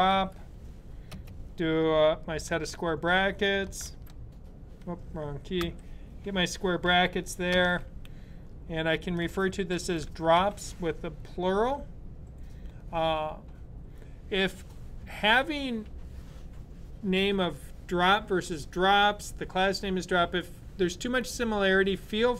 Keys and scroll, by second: 0.0-0.5 typing, 3.7-5.4 typing, 6.8 typing, 8.9-10.6 typing.